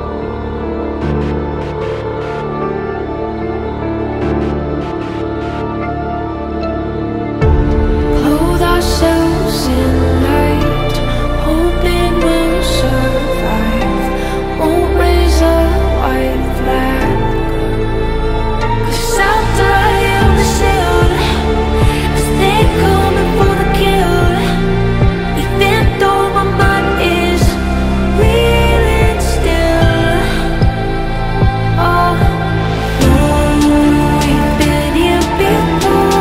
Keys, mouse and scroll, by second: 3.1 scroll down 1, 3.9-5.1 scroll up 1, 6.2 Right, 6.3-7.0 typing, 10.5 alt+scroll down 1, 10.6 alt+scroll up 1, 10.9 alt+scroll down 1, 11.5 ctrl+t, 13.5 alt+scroll up 1, 15.2-15.8 alt+scroll down 2, 15.9 ctrl+t, 21.2-22.9 typing, 24.0 Right, 24.1-26.9 typing, 30.2 alt+scroll up 1, 30.7 ctrl+z, 32.6 alt+click, 34.0 alt+click, 34.5 alt+click, 35.9 ctrl+t.